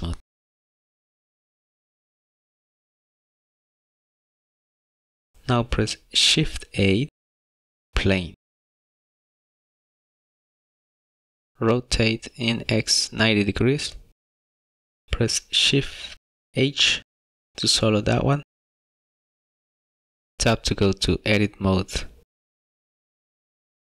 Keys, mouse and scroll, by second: 1.3 right click, 2.9 scroll up 2, 3.0 middle click, 3.6 middle click, 3.9 scroll down 2, 4.0 middle click, 7.1 shift+a, 12.9 click, 14.2 click, 16.6 shift+h, 20.4 shift+middle click, 21.1 Tab.